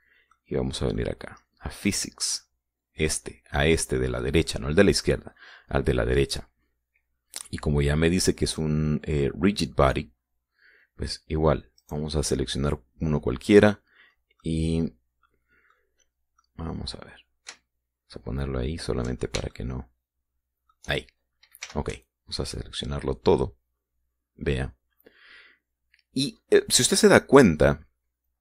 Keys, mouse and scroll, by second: 1.1 middle click, 2.6 click, 12.5 right click, 15.1-16.6 middle drag, 17.1-20.0 middle drag, 20.3-21.6 shift+middle drag, 22.4 b, 22.8-24.3 drag.